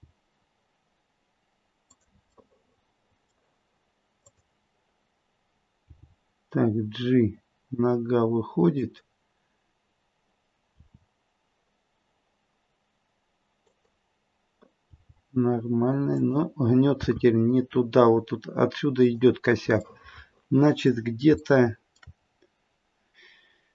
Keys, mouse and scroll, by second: 2.4 middle click, 4.2 click, 5.9 g, 10.8 r, 14.8 g, 17.0 r, 19.9 middle click, 20.4 middle click, 20.6 middle click, 21.3 shift+scroll up 1, 21.4 shift+middle click, 22.2-23.7 scroll up 1.